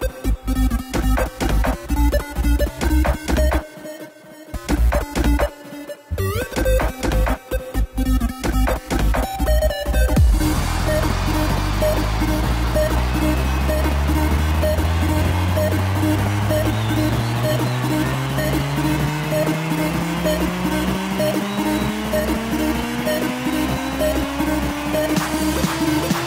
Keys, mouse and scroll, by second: 2.0 r, 3.5 g, 6.0 KP_0, 7.7 click, 9.3 shift+click, 10.6 KP_7, 12.6 shift+d, 18.1 click, 18.6 click, 19.5 r, 21.7 g, 24.5 click, 25.8 r.